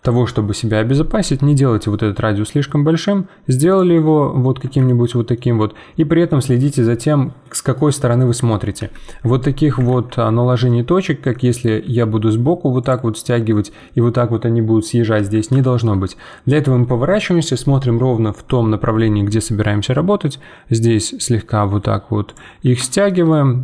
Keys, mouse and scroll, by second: 1.2 g, 3.9-8.8 middle drag, 8.8 ctrl+z, 9.9 ctrl+z, 10.6-11.8 middle drag, 11.8 g, 13.1-15.1 middle drag, 15.1 ctrl+z, 15.6-19.0 shift+middle drag, 22.9-23.6 shift+middle drag.